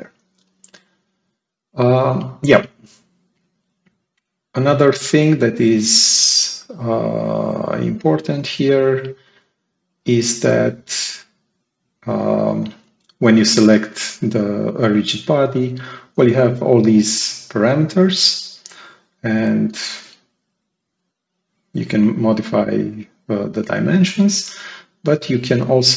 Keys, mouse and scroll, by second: 1.0 click, 4.4-4.9 scroll down 2, 4.9-6.0 right drag, 7.4 click, 7.9 right click, 11.6 right click, 18.6-21.8 drag.